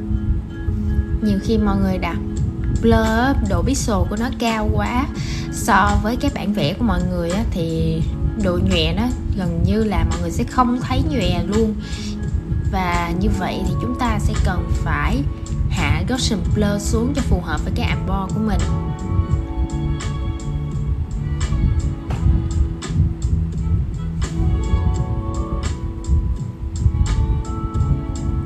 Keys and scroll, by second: 21.6 super+z, 22.0 super+z, 23.3 shift+super+z.